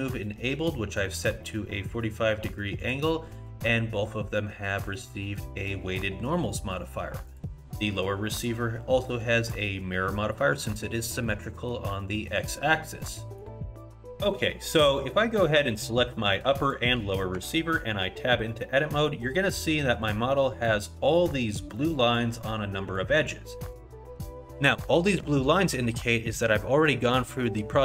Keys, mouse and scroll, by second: 4.7 click, 4.7 click, 7.3 click, 10.4 middle click, 11.3 middle click, 12.0 middle click, 12.5 middle click, 13.6 click, 15.7 click, 16.6 shift+click, 17.4 Tab, 18.6 middle click, 19.3 middle click, 20.3 middle click, 21.8 middle click, 22.7 middle click, 23.3 middle click, 25.0 scroll up 1.